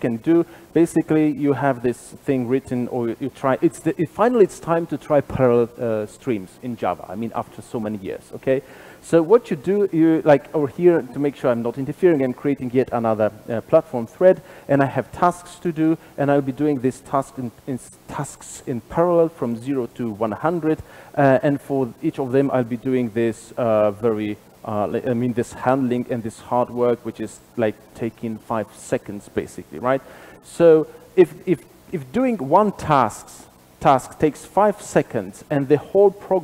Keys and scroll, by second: 3.0 super+b, 22.7 super+b.